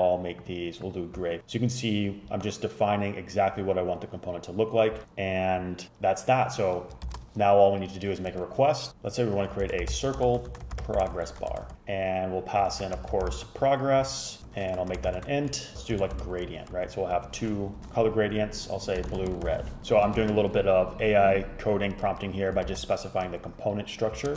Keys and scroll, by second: 7.1 shift+super+Left, 8.4-17.7 typing, 18.8-20.2 typing, 20.3 shift+super+Left, 22.8 shift+super+Left.